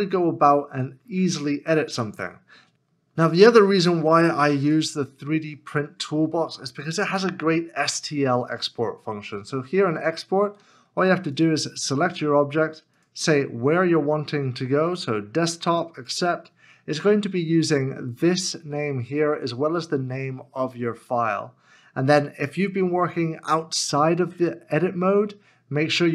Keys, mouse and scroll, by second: 0.6-1.7 scroll down 1, 1.7 middle click.